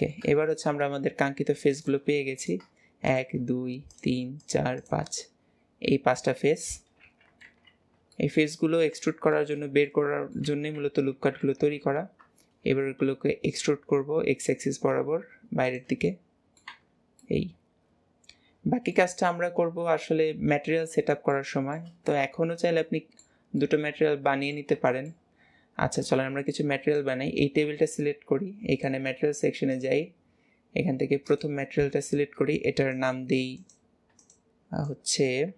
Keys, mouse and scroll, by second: 4.4 click, 10.1-16.1 middle drag, 16.7-17.2 middle drag, 18.1-19.3 middle drag, 21.2-25.5 middle drag, 26.0 scroll down 3, 26.2 shift+middle click, 27.0 click, 28.3-28.7 scroll up 2, 28.7 click, 29.7-35.5 drag.